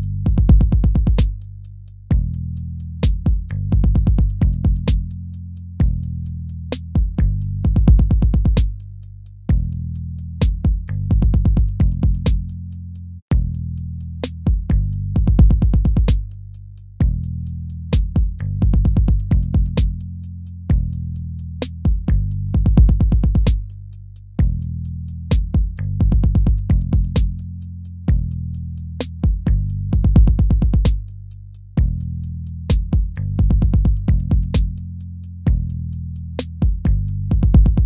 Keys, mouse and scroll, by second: 3.0 ctrl+-, 7.6 ctrl+-, 12.8 ctrl+z, 13.6 ctrl+c, 14.7 ctrl+v, 15.3 ctrl+v, 16.0 ctrl+v, 16.5 ctrl+v, 16.7 ctrl+v, 29.3 ctrl+z, 30.3 ctrl+z.